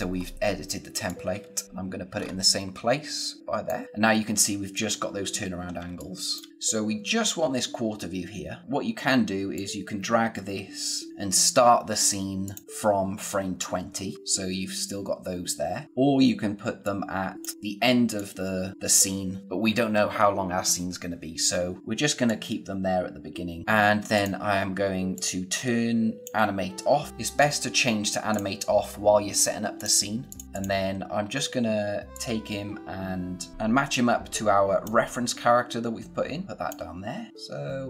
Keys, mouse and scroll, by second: 0.1-1.0 scroll up 1, 1.0 click, 1.3 space, 2.1-2.8 scroll up 1, 2.8 space, 5.8 space, 5.9 click, 6.3 space, 6.5 click, 9.5 click, 16.8 click, 22.2 click, 23.6-24.1 scroll up 1, 24.1 click, 31.1-32.1 scroll up 1, 32.1 click, 33.5 z, 33.9 click.